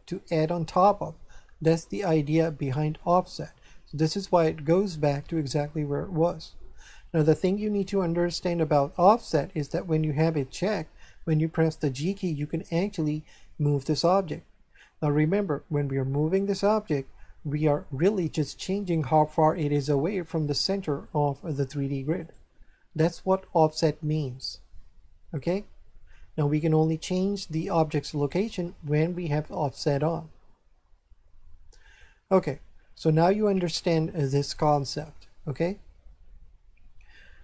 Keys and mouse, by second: 12.0 g, 22.2 right click.